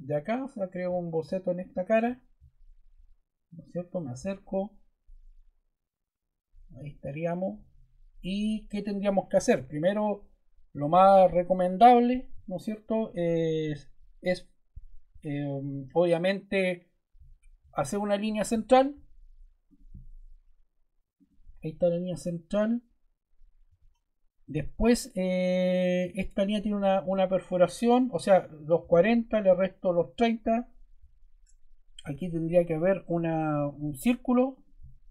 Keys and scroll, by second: 23.6 Escape, 31.9 c.